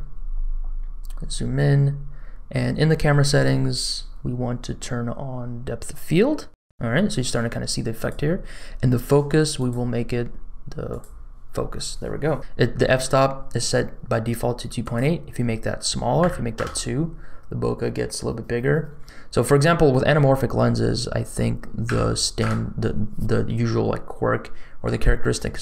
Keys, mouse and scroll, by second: 0.2-0.8 scroll up 2, 3.1-3.6 scroll down 3, 5.8 click, 7.9 click, 9.5 click, 14.8-16.6 drag, 21.2-22.5 drag.